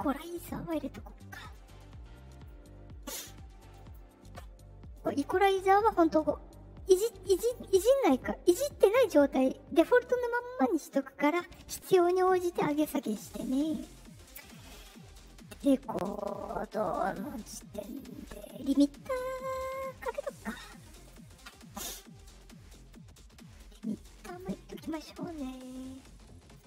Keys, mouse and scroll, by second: 2.4 click, 3.7 click, 4.9 click, 11.3 click, 15.9 click, 21.0 click, 22.8-24.3 drag, 26.5 click.